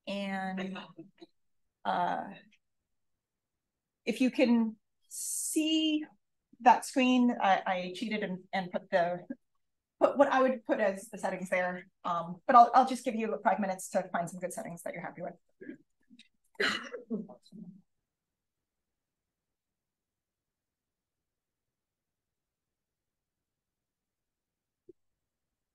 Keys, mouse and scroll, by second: 14.5 click, 15.9 BackSpace, 16.3 3, 16.7 5, 19.8 click, 21.1 0, 24.3 click, 25.2 1.